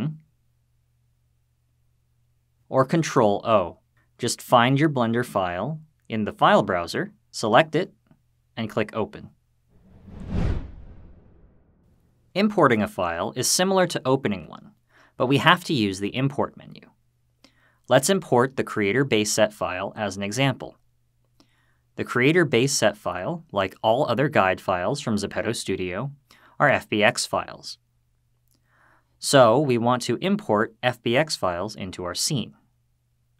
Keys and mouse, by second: 2.7 ctrl+o.